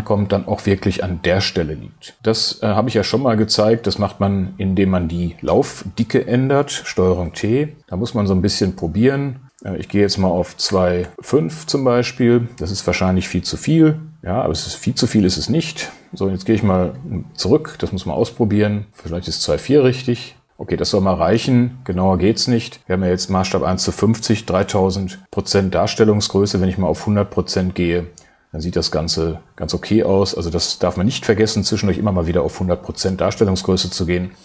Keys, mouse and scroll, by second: 7.1 super+t, 10.7 BackSpace, 13.9 click, 17.9 super+t, 18.9 shift+super+t, 26.4 click.